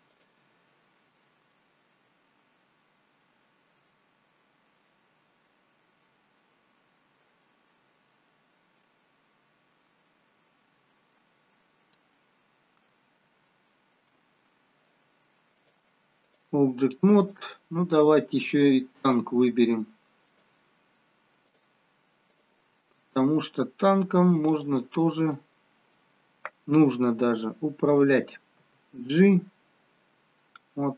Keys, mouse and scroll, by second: 1.1 middle click, 5.9 middle click, 11.5-12.1 scroll down 3, 12.1 middle click, 13.2 shift+middle click, 14.3-14.9 scroll down 2, 15.5 click, 17.2 shift+click, 18.4 click, 19.0 click, 21.6 click, 22.7 middle click, 24.9 click, 25.4 middle click, 28.8 g.